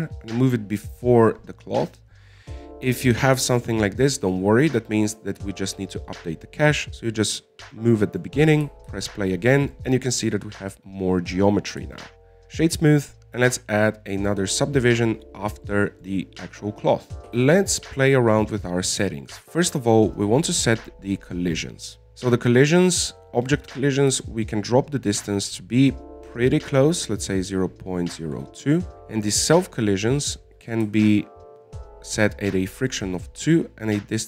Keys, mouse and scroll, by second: 8.3 click, 9.1-10.2 middle drag, 10.2 alt+a, 11.2-12.8 middle drag, 12.8 w, 14.8-17.1 drag, 17.1 middle click, 17.8-18.6 scroll down 7, 18.6 alt+a, 18.8 scroll down 3, 19.1 middle click, 19.4-20.1 scroll up 4, 20.1-21.5 scroll down 14, 21.5 click, 21.8-24.4 scroll down 7, 25.4-28.5 drag, 29.5 scroll down 4, 30.8 click, 31.9-34.2 drag.